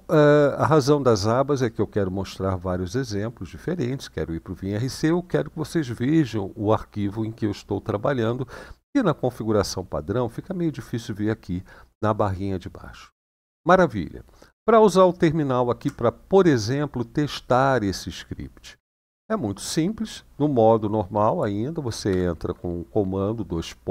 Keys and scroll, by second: 21.9 typing.